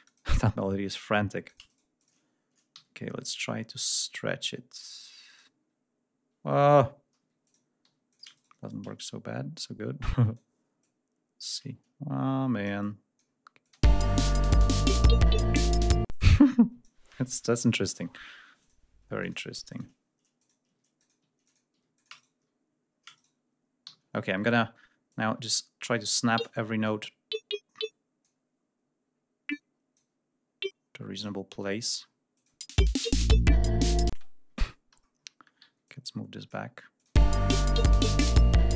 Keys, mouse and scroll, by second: 0.4 s, 1.2-2.0 shift+drag, 1.4 shift+right click, 2.5 t, 3.2-5.3 drag, 7.0 g, 7.2 click, 7.6 s, 7.9-8.4 shift+drag, 8.1 shift+right click, 8.5-10.3 shift+drag, 10.6-13.1 drag, 13.4 alt+click, 13.5 space, 15.9 space, 16.1-16.8 drag, 18.4 click, 18.8 e, 19.0 click, 19.5 click, 20.2 click, 20.4 s, 20.8 click, 21.0 g, 21.2 click, 21.7-22.2 shift+drag, 21.7 s, 22.1 shift+right click, 22.9 shift+right click, 23.6 shift+g, 24.0 ctrl+shift+scroll up 1, 24.9 click, 25.9 e, 31.7 ctrl+scroll down 2, 32.1 ctrl+click, 32.3 ctrl+space, 33.9 space, 34.1 ctrl+scroll down 1, 34.8 ctrl+scroll up 1, 35.4 ctrl+g, 35.6-36.5 drag, 36.7 click, 36.9 space.